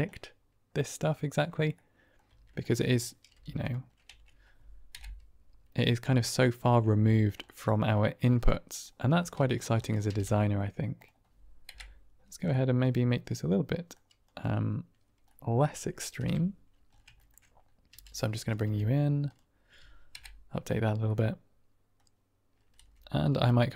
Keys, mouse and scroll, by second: 0.0-1.5 middle drag, 1.7-2.0 middle drag, 2.2 Tab, 2.6 click, 2.7 middle click, 3.2 x, 4.0 Tab, 5.2 Right, 6.1-6.7 middle drag, 7.0 shift+middle drag, 7.3 middle drag, 8.4 middle drag, 9.3 Tab, 9.7 click, 10.0 g, 10.2 z, 10.9 click, 12.0 Right, 12.4-13.8 middle drag, 14.3 click, 15.2 middle click, 16.1 KP_7, 17.1 shift+middle click, 17.8 g, 18.4 click, 18.5 r, 19.2 click, 20.4 Right, 21.0 middle click, 22.7 KP_1, 23.2 KP_3.